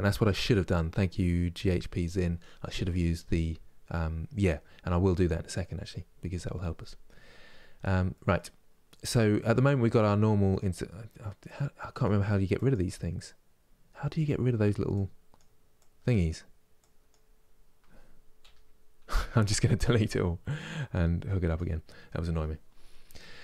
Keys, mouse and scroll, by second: 9.7-18.1 drag, 18.1 Delete, 20.2-23.4 drag.